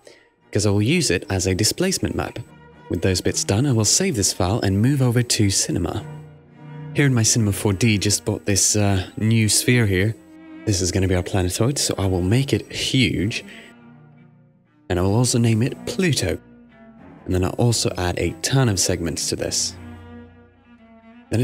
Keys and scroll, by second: 0.0-1.2 typing, 1.4 Return, 5.3 super+s, 13.2 0, 13.2 Return, 14.2 s, 15.5-16.8 typing, 18.9-20.4 typing, 20.5 Return.